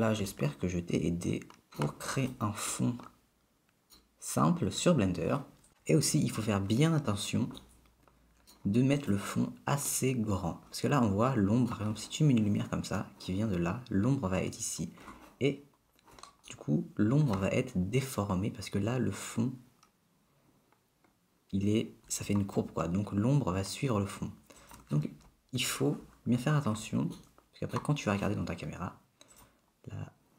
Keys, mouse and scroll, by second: 0.5 shift+middle click, 2.4 click, 2.9 middle click, 7.7 middle click, 9.1 click, 10.2 middle click, 16.6 middle click, 24.6 click, 27.3 middle click, 29.6 click.